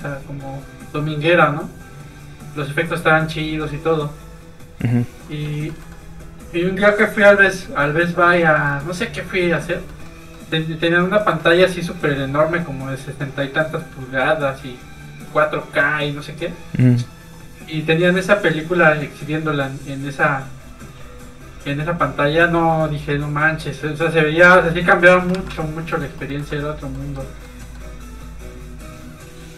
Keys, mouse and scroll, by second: 5.6 shift+middle click, 8.5 shift+middle click, 8.7 middle click, 8.8 middle click, 9.6 scroll up 1, 9.8 middle click, 10.1 scroll down 1, 10.3 middle click, 11.4 shift+middle click, 13.2 click, 13.3 click, 21.0 scroll up 1, 21.8 click, 23.6 scroll down 1, 24.2 click, 25.3 alt+a, 25.9 middle click, 26.2 shift+middle click, 26.5 middle click, 26.6 middle click, 28.0 click.